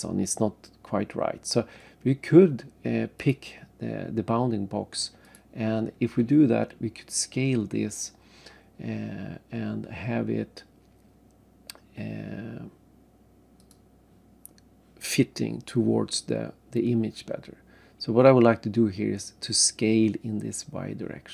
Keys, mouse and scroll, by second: 3.2 click, 5.2 click, 13.6 click, 15.3-16.5 scroll up 3.